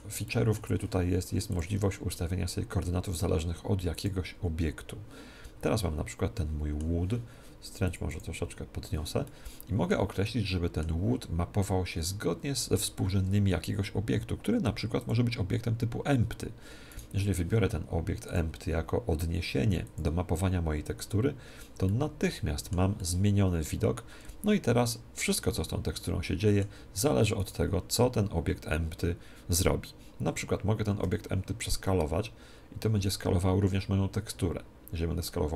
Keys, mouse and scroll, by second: 1.4-3.2 drag, 5.3-7.4 middle drag, 7.8-9.8 drag, 9.2-12.1 middle drag, 12.9 shift+a, 16.9-18.7 right drag, 18.2-20.0 drag, 21.8-26.6 middle drag, 27.3-29.3 right drag, 30.9 s.